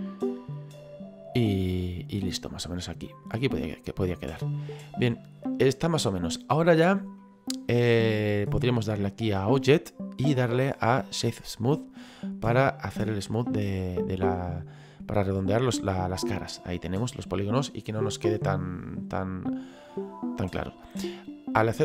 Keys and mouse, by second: 2.3 click, 7.2 middle click, 9.8 click, 11.4 click, 12.3 middle click, 15.7 middle click, 17.1 middle click, 19.9 middle click.